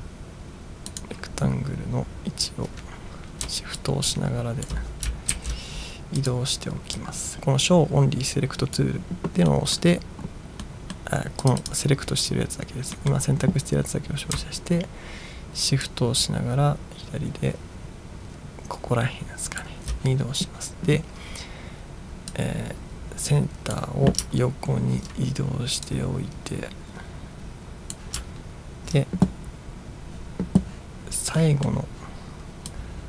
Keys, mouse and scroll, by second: 1.0 click, 3.9 shift+click, 5.6 ctrl+z, 6.4 click, 7.1-8.9 drag, 9.6 middle drag, 10.7-11.0 middle drag, 11.5 click, 11.7 click, 13.0 middle click, 16.0-19.6 shift+drag, 22.3-23.8 drag, 24.4-24.9 ctrl+scroll up 4, 26.0-28.1 drag, 28.3-29.0 ctrl+scroll down 3, 31.5 middle drag, 32.8-33.0 drag.